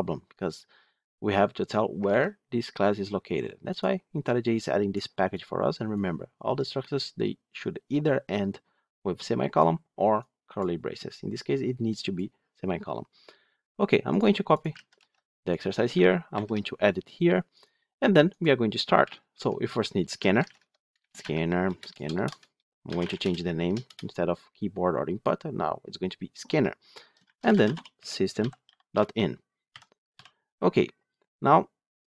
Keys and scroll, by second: 1.9 ctrl+x, 6.0 ctrl+z, 16.3 ctrl+v, 18.9 Tab, 20.8 Tab, 20.8 Return.